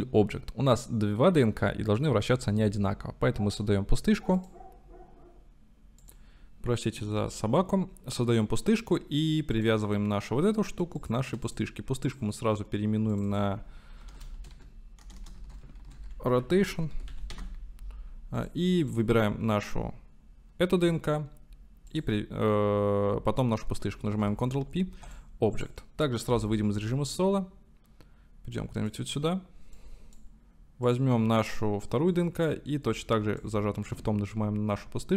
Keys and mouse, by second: 9.5 click, 11.5 click, 12.1-13.2 drag, 13.3-18.1 drag, 15.2 BackSpace, 18.4 click, 18.8 click, 21.9 shift+click, 24.3 ctrl+p, 26.4 KP_Divide, 28.6 click, 29.8-30.2 drag, 31.0-33.5 drag.